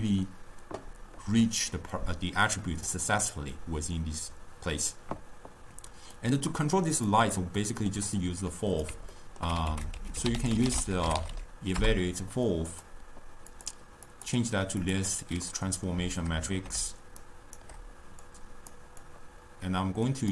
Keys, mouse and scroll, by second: 2.8 click, 6.2-7.7 drag, 7.7 middle click, 8.2 click, 9.2 ctrl+middle click, 9.8 ctrl+a, 11.4 l, 14.1 click, 14.2-15.6 drag, 15.6-17.3 middle drag, 17.3 shift+right click, 18.3 click, 19.1 drag.